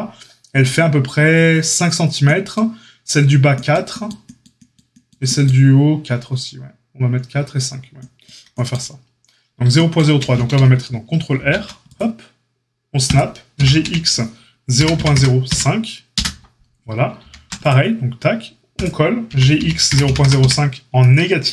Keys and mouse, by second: 11.3 ctrl+r, 13.5 g, 17.2 ctrl+r, 19.2 g.